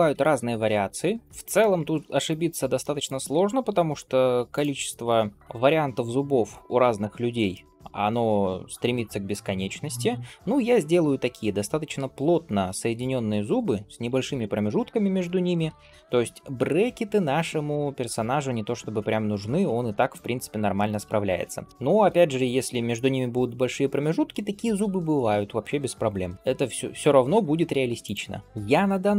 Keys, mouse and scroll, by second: 0.0 g, 1.4 middle click, 2.1 click, 2.6 middle click, 3.2 g, 4.9 click, 5.3 g, 6.6 scroll down 2, 7.0 shift+middle click, 7.4 middle click, 7.9-8.3 scroll up 1, 8.3 click, 8.8 middle click, 9.5 click, 10.8 g, 13.4 click, 14.2 middle click, 14.8 click, 15.3 shift+click, 16.4 g, 17.9 click, 18.4 middle click, 18.9 g, 20.6 shift+middle click, 21.0 middle click, 21.7 shift+middle click, 22.2 click, 22.8 scroll down 1, 23.3-25.2 scroll up 1, 26.3 g, 28.3 middle click, 28.4-29.1 scroll up 2.